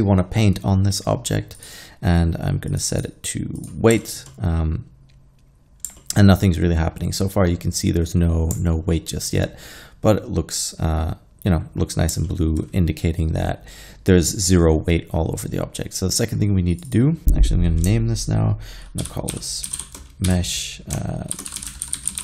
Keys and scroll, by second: 19.1-20.3 typing, 21.4-22.2 typing.